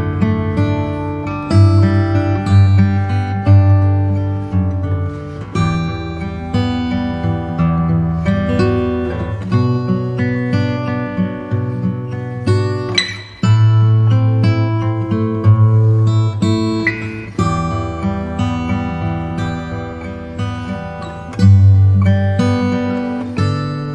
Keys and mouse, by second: 2.3 KP_7, 20.8-22.9 drag, 22.0 KP_0.